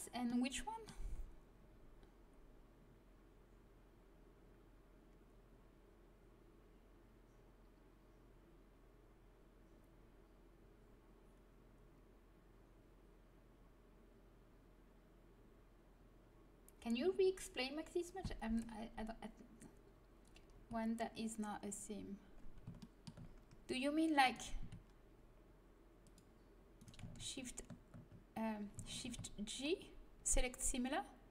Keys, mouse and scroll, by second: 0.2-1.3 middle drag, 20.5 z, 21.6 middle click, 22.5-24.3 middle drag, 24.3-26.5 right drag, 26.5 click, 26.7 right click, 27.1 shift+s, 28.0 right click, 28.9 shift+g.